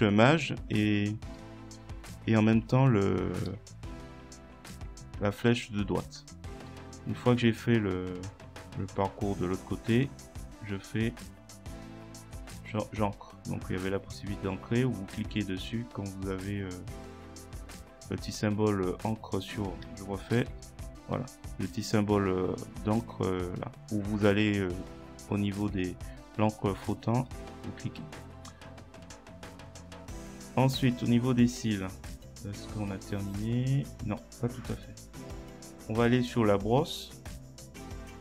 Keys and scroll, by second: 3.1 shift+Right, 3.5 shift+Left, 20.4 ctrl+z.